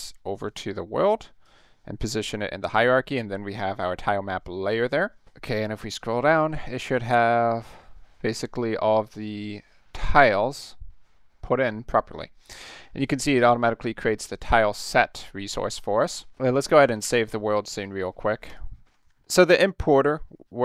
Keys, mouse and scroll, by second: 2.4-2.7 middle drag, 5.4 middle click, 5.8 middle click, 6.2 middle click, 6.5 middle click, 6.9 middle click, 7.4 middle click, 7.7 middle click, 8.3 middle click, 8.6 middle click, 9.0 middle click, 9.3 middle click, 9.6 middle click, 10.0 middle click, 10.3 middle click, 10.6 middle click, 10.9 middle click, 11.2 middle click, 11.8 middle click, 13.4 click, 17.0 ctrl+s, 18.5 click, 19.0 ctrl+s.